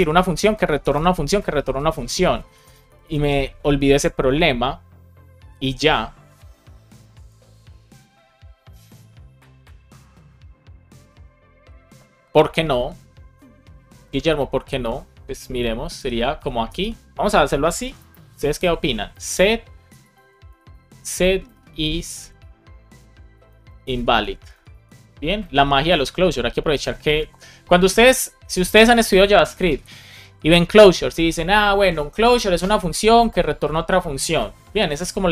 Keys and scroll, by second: 0.0-0.8 typing, 2.4 Left, 15.8 [, 16.2 space, 16.6 BackSpace, 18.0-19.8 typing, 21.4 shift+i, 23.2 shift+i, 24.0 space, 24.3 Left, 25.3 super+c.